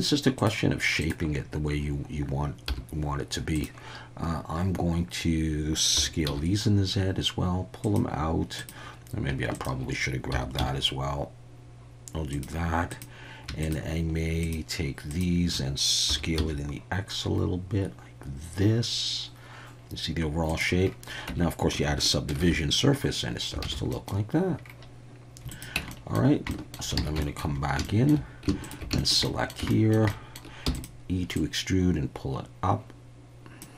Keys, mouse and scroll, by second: 2.7 t, 3.5 click, 5.9 s, 6.2 z, 7.8 click, 8.6 click, 10.3 s, 10.5 z, 12.3 click, 12.9 click, 13.6 shift+click, 15.1 shift+click, 16.1 s, 16.4 x, 20.5 click, 21.3 Tab, 22.5 ctrl+2, 23.6 alt+a, 23.9 middle click, 25.5 click, 25.7 Tab, 25.9 middle click, 26.5 shift+middle click, 27.1 alt+a, 27.2 shift+middle click, 27.8 shift+middle click, 28.6 alt+shift+click, 29.0 shift+middle click, 29.2 middle click, 29.7 shift+middle click, 30.1 middle click, 30.7 e, 30.7 click, 31.4-33.6 drag.